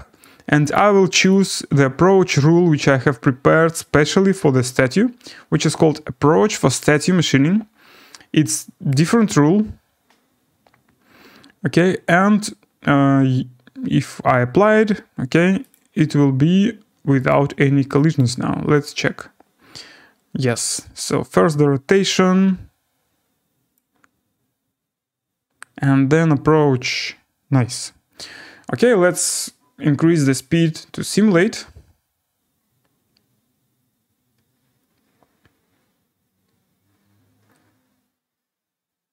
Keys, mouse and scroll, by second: 0.7 click, 1.3 click, 6.8 click, 8.5 click, 9.0 click, 15.7 click, 17.3 click, 18.2 click, 18.8 click, 19.9 scroll down 5, 20.7 right click, 23.3 scroll.